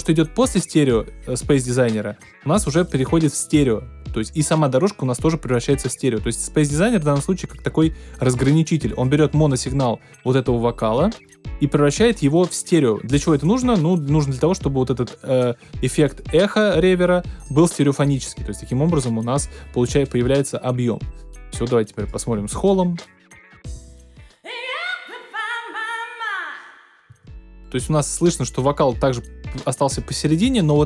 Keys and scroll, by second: 23.7 space, 27.0 space.